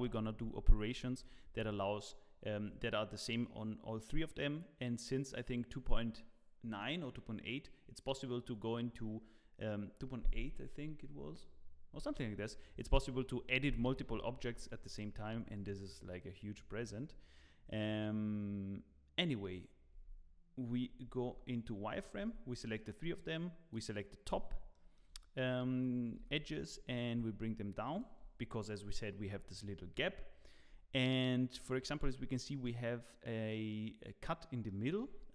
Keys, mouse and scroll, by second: 0.6 Tab, 0.7 scroll up 2, 14.4 1, 15.5 click, 16.7-18.1 scroll down 1, 18.1-18.5 scroll down 6, 19.4-21.2 scroll up 5, 19.9 Tab, 21.2 z, 21.9-22.6 scroll up 2, 22.2 Tab, 23.1 click, 24.4 scroll up 2, 24.7 shift+middle click, 26.1 g.